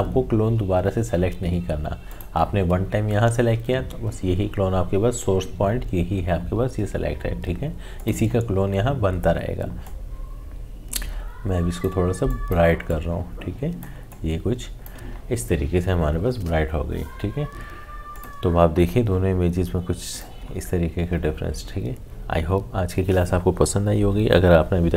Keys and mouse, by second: 2.1 click, 8.0-17.2 drag, 18.1 click.